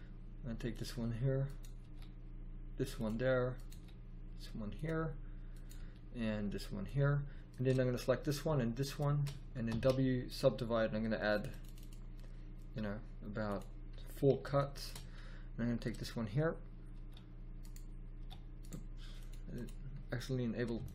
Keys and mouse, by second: 1.8 g, 3.2 click, 3.7 g, 5.4 middle click, 5.7 g, 7.3 right click, 9.6 w, 11.3 click, 16.8 g, 18.1 g.